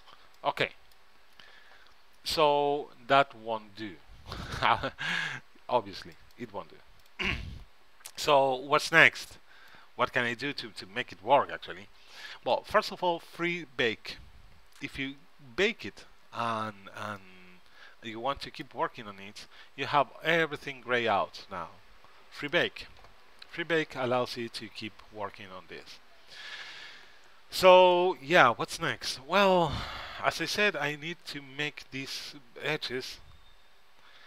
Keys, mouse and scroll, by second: 0.5-6.3 middle drag, 6.3-10.8 drag, 6.3-9.1 right drag, 17.3-19.2 middle drag, 22.6-24.5 drag, 28.1 middle click, 33.0-34.2 middle drag.